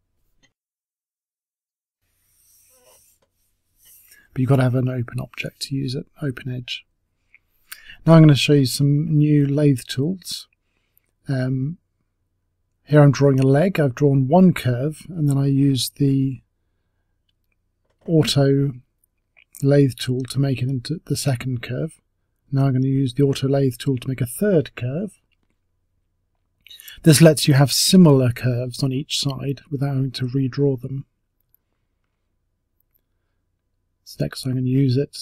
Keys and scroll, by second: 5.0 Delete, 14.6 t, 26.1 t.